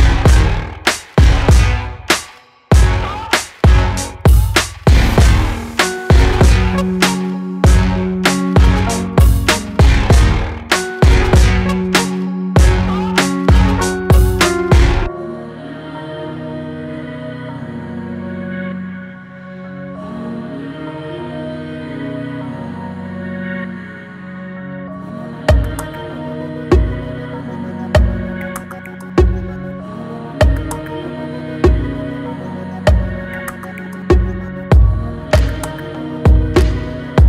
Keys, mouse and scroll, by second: 0.3 shift+click, 0.7-2.7 middle drag, 5.0 alt+middle click, 5.7 shift+middle click, 6.5 scroll up 1, 7.0 click, 7.4 middle click, 8.2 shift+click, 8.6 middle click, 9.1 shift+click, 9.5 middle click, 9.9 shift+click, 11.2 e, 16.0 Tab, 16.3-18.0 middle drag, 18.0-18.5 scroll down 3, 18.5-19.7 middle drag, 19.7 Tab, 20.0 click, 20.4 middle click, 21.1-22.7 right drag, 22.7 middle click, 23.2 scroll up 2, 23.7 shift+middle click, 24.6 ctrl+r, 28.1 ctrl+b, 32.0-33.2 middle drag, 33.2 g, 35.6 click, 36.3 click, 36.9 click.